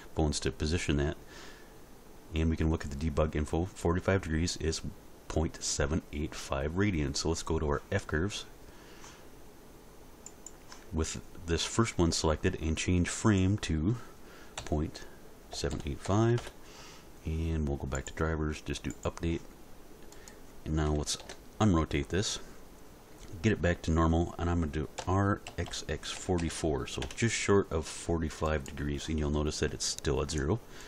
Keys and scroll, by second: 14.6 ., 15.5 7, 15.7 8, 16.0 5, 16.4 Return, 21.2 alt+r, 25.0 r, 25.5 x, 26.1 4, 27.0 Return.